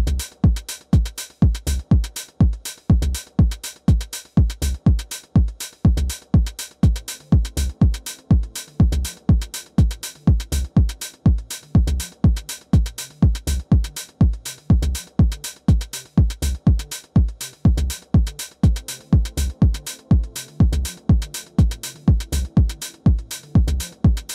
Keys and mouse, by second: 0.4-1.6 alt+drag, 1.9 alt+middle click, 2.4 alt+middle drag, 3.1-3.6 alt+drag, 4.7 alt+middle click, 5.3 alt+middle click, 5.8 alt+middle click, 11.6-14.0 drag, 15.2-19.9 drag.